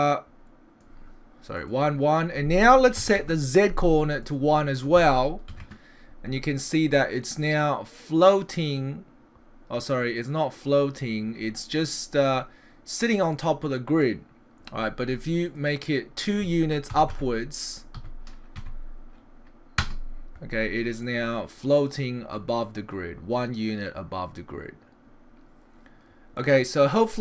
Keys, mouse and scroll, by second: 1.6 click, 4.2 click, 6.9 middle click, 11.6 middle click, 15.5 click, 17.1 Left, 21.0 middle click.